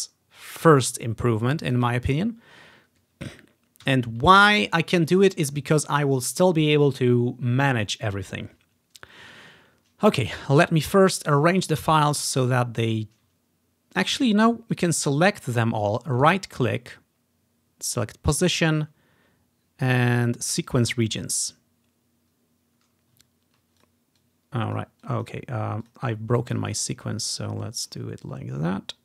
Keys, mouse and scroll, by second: 1.8-3.1 drag, 3.9 g, 4.5 ctrl+scroll down 1, 5.0 ctrl+scroll down 1, 5.7-6.5 scroll down 1, 10.9 ctrl+scroll down 1, 11.7 click, 12.4-14.0 drag, 13.7-14.8 scroll down 2, 14.8 click, 16.2 click, 16.3 right click, 20.8-22.1 drag, 23.4 ctrl+scroll down 2, 23.9 click, 24.0-26.1 drag, 26.7 click, 28.0 click, 28.8-29.0 drag.